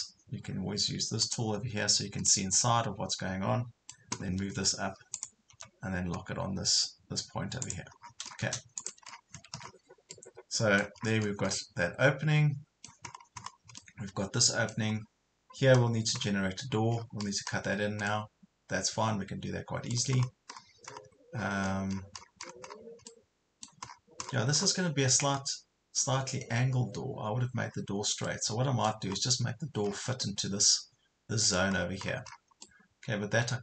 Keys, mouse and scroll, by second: 2.3-4.2 middle drag, 5.1 click, 7.7 click, 8.1 scroll down 1, 8.8 click, 9.1-9.7 scroll down 2, 9.3 Escape, 10.3 middle click, 11.0 scroll down 1, 11.5 middle click, 13.1 scroll up 1, 13.8 middle click, 14.9 scroll down 1, 15.3 scroll up 1, 16.9 scroll down 1, 17.5 scroll down 1, 18.1-20.1 middle drag, 20.1 scroll up 1, 21.3 scroll down 1, 23.1 middle click, 23.9 scroll up 1, 27.7 scroll down 1, 28.3 middle click, 29.1 scroll up 1, 29.9 scroll down 1, 30.2 middle click, 31.6 scroll up 1, 31.8 scroll down 1, 32.7-33.6 middle drag.